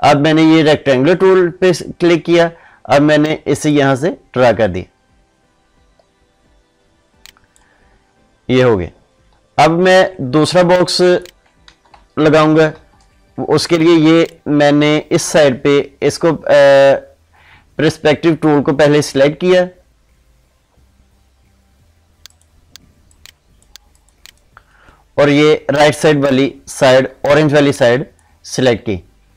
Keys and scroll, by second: 12.7 ctrl+z.